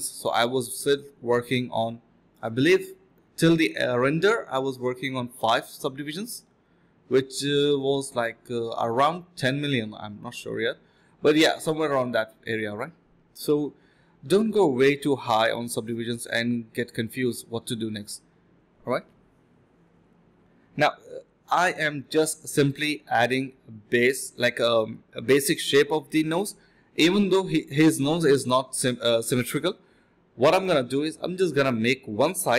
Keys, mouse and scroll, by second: 1.2 alt+click, 1.5 alt+click, 1.8 ctrl+click, 2.4 alt+click, 3.3 ctrl+v, 3.5 ctrl+b, 3.8-6.2 typing, 6.5 alt+click, 6.9 scroll down 1, 7.1 middle click, 7.2 scroll up 1, 7.3 middle click, 8.3 double click, 8.6 typing, 10.7 typing, 13.8 typing, 16.1 alt+click, 16.4 alt+click, 16.6 alt+click, 16.9 alt+click, 17.2-18.9 typing, 20.0 typing, 24.4 alt+click, 26.1 alt+click, 28.9 alt+click, 30.0 typing, 32.4 ctrl+b.